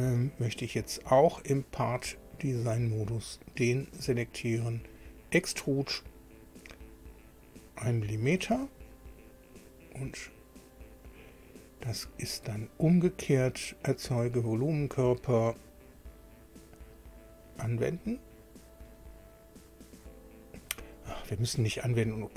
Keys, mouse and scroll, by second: 2.6 click, 4.9 click, 8.5 1, 10.0-10.6 scroll down 4, 12.2 click, 14.0 click, 15.9 click, 17.4 click, 18.9 click.